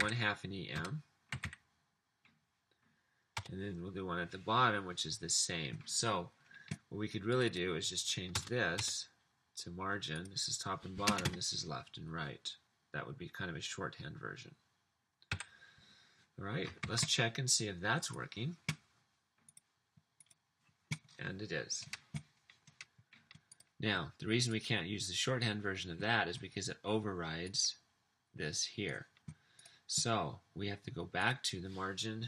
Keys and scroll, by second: 0.0-2.9 typing, 3.4 Return, 8.4 BackSpace, 8.7 BackSpace, 11.2-12.3 typing, 15.4 ;, 16.9 super+s.